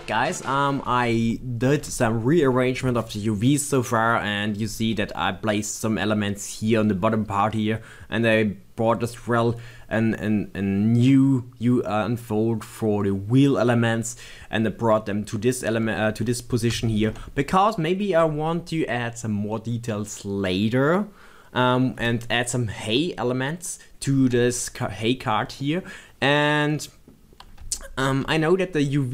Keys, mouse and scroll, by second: 25.9 middle click.